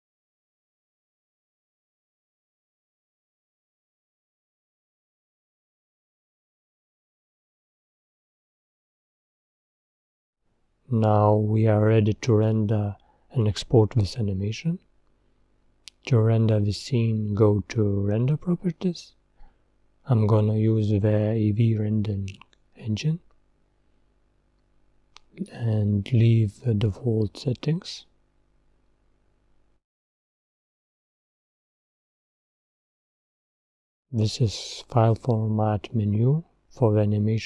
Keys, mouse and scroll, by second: 2.1 click, 4.3 click, 17.0 click.